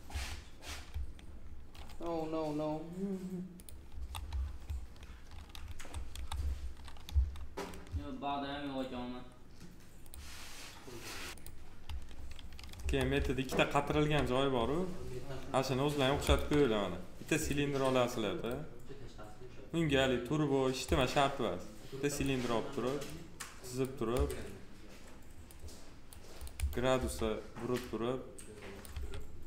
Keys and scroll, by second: 0.0 2, 3.9 F4, 12.6 F4, 26.8 e, 28.8 w.